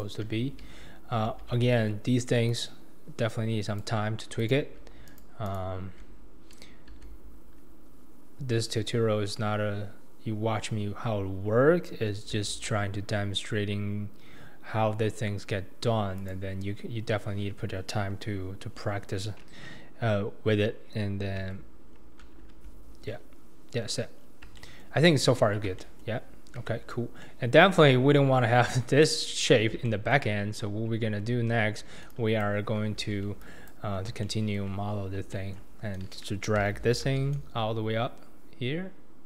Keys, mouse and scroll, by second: 0.0 click, 0.4 alt+z, 1.3 alt+z, 2.5 click, 4.4 click, 5.1 alt+click, 5.5 alt+click, 6.9 x, 12.4 x, 21.5 Tab, 21.9-22.2 scroll down 2, 22.4 alt+z, 23.1-23.4 scroll down 2, 23.4-24.2 scroll up 2, 24.2-24.6 scroll down 4, 24.6-25.1 shift+middle drag, 25.1-25.8 scroll down 4, 25.8-26.4 shift+middle drag, 26.4-26.7 scroll up 2, 26.7-30.3 shift+middle drag, 27.1 scroll down 1, 27.8-29.5 scroll down 2, 29.5-29.9 scroll up 1, 30.3-31.1 scroll down 1, 31.1 Tab, 32.1 click, 33.0 alt+z, 33.4 click, 33.9-34.2 scroll down 3, 34.2-36.6 shift+middle drag, 36.6 g.